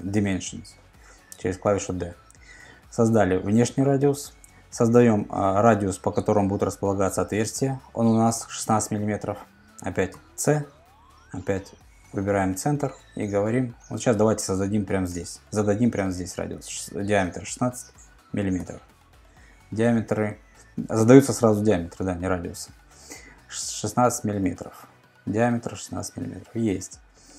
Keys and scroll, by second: 3.2 super+Tab, 8.9 super+Tab, 10.1 c, 16.3-17.2 typing, 18.6 Return, 24.3 super+Tab.